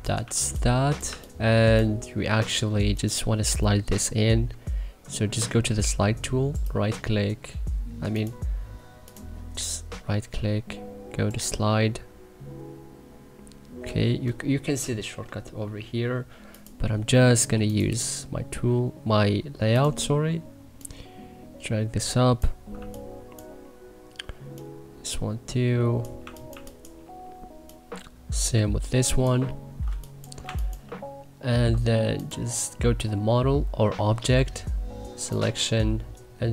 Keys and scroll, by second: 0.2 2, 1.0 1, 22.7 1, 26.2 2, 26.5 1, 29.9 1, 30.4 2.